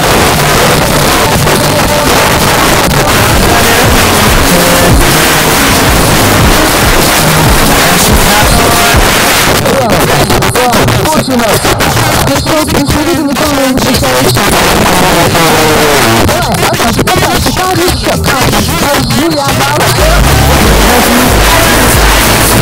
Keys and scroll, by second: 9.1 Page_Down.